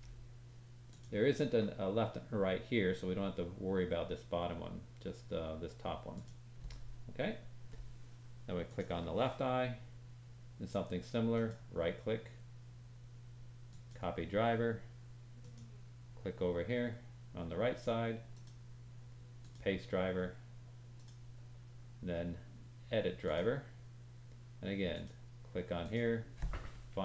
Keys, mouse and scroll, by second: 8.6 click, 11.3 right click, 15.3 click, 15.3 middle click, 15.3 right click, 18.3 right click, 20.9 right click.